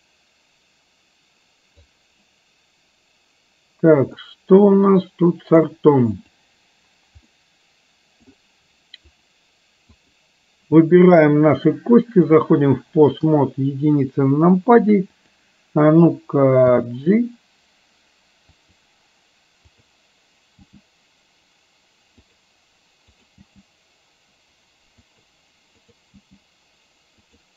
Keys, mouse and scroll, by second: 4.3-5.8 middle drag, 6.2 click, 7.3-8.3 middle drag, 9.3 click, 10.1 click, 11.7-12.6 drag, 13.3 KP_1, 15.2 click, 16.8 g, 20.8 g, 23.2 click, 23.7 g, 25.8 click.